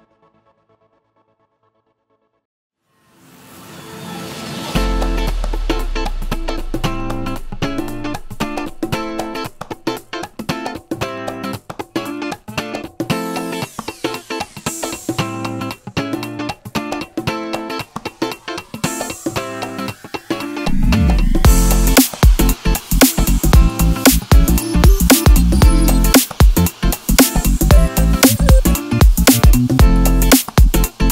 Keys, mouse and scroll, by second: 0.3-3.5 drag, 2.6 KP_Enter, 3.7 click, 3.8-5.2 middle drag, 4.0-4.3 scroll down 2, 4.3 KP_0, 4.9 ctrl+s, 5.2 click, 6.0-9.3 drag, 6.5 KP_Enter, 7.9 KP_Enter, 15.5 middle click, 15.7 scroll down 2, 15.8 scroll up 2, 16.0 click, 16.4 Tab, 16.8 click, 18.6 click, 18.9 KP_7, 20.5 g, 24.9 ctrl+shift+click, 25.9-30.2 middle drag, 30.2 click.